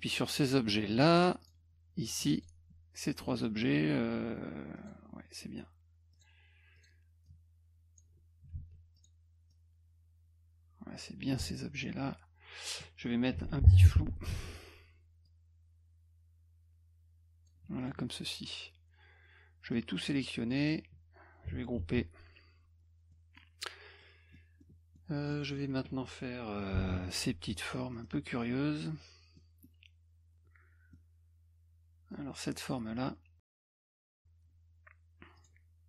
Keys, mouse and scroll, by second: 0.9 click, 1.1 click, 1.4 click, 2.3 shift+click, 4.8 click, 6.1 click, 6.8 click, 7.2-8.0 drag, 8.5 ctrl+z, 9.0 click, 9.5-11.0 drag, 13.9 ctrl+shift+f, 15.2-17.5 drag, 17.8 click, 19.7 click, 21.8 ctrl+g, 23.1 middle click, 24.0 middle click, 24.6 middle click, 25.3 middle click, 26.8 b, 27.9 middle click, 29.4 middle click, 30.9-32.1 middle drag, 35.4 click.